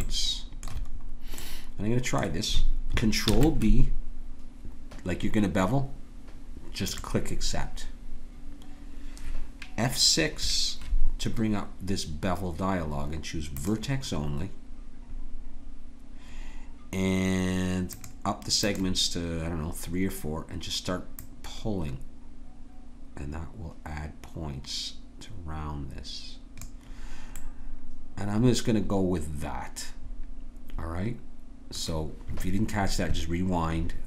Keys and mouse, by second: 3.3 ctrl+b, 10.2 F6, 27.4-29.3 middle drag.